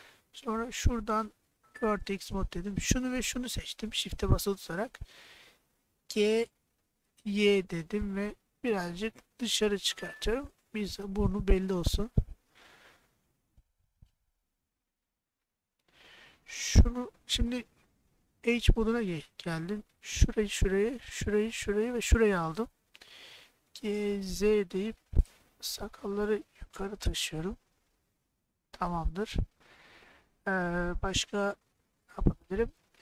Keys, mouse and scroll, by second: 1.6 1, 2.6 click, 6.1 g, 7.8 y, 10.1 click, 10.6 middle click, 12.7 middle click, 14.3 3, 17.4 2, 21.5 shift+click, 23.7 g, 24.4 z, 28.2 click, 29.1 click, 30.1-31.2 middle drag, 31.8-32.8 middle drag.